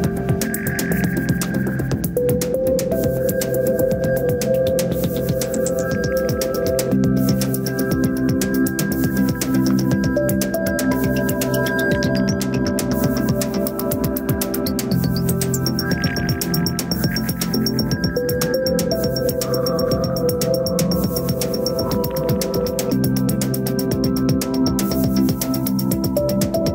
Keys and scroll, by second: 9.3 ctrl+d.